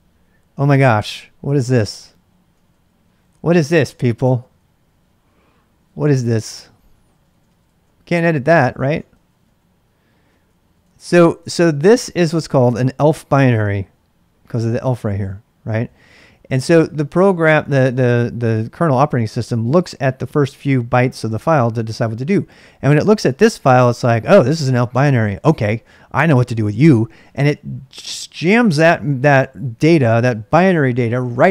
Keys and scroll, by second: 1.8-11.8 typing, 14.4-17.0 typing.